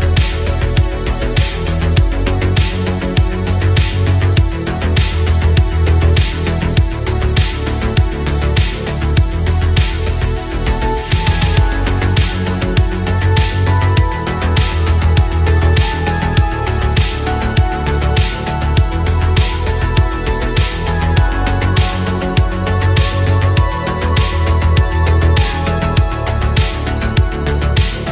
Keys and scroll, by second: 2.1 ctrl+z, 3.0 space, 20.5 ctrl+z, 20.8 ctrl+z, 21.6 ctrl+z, 22.0 ctrl+z, 23.3 ctrl+z, 27.1 ctrl+z.